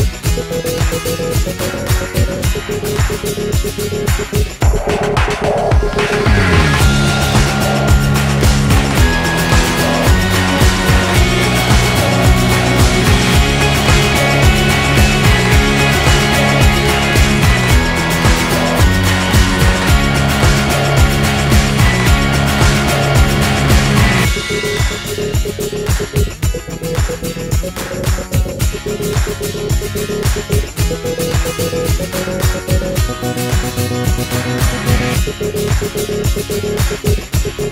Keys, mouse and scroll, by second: 1.0 Tab, 1.3-5.6 typing, 2.4 ctrl+n, 3.0 right click, 5.3 right click, 5.7 click, 6.3 middle click, 6.4 Tab, 6.8 shift+d, 8.5 shift+d, 9.5 shift+r, 10.2 right click, 10.9-12.3 middle drag, 12.3 click, 12.7-14.6 drag, 14.8 click, 15.3-17.3 drag, 17.1 right click, 17.5 click, 17.8 x, 18.9 right click, 19.2 Tab, 19.7 click, 20.3-21.3 drag, 23.6 middle click, 24.4-27.2 right drag, 25.9 g, 29.3-31.0 right drag, 30.2 g, 31.9-33.7 right drag, 32.3 g, 34.7-37.7 typing, 35.9 click, 36.1 right click.